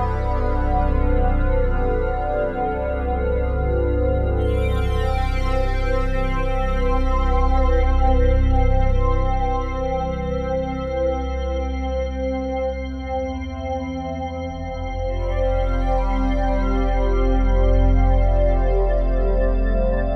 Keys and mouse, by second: 0.9-1.8 drag, 2.2-9.6 drag, 10.6 click, 11.4 click, 14.3 click, 16.1 click, 17.0 click, 18.4 click, 19.2-20.1 drag.